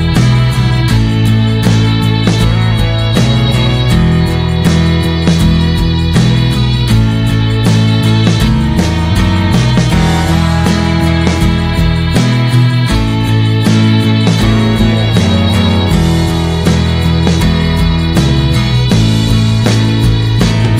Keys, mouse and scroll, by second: 0.1-2.5 middle drag, 2.5-5.2 drag, 5.9-8.3 middle drag, 8.3-11.6 drag, 11.6 scroll down 1, 11.8-14.1 middle drag, 14.1-15.2 scroll down 1, 15.2 click, 15.7 middle click, 15.8 scroll up 1, 15.9 click, 16.2 shift+middle click, 16.5 click, 17.9 click, 18.6 middle click, 18.9 click.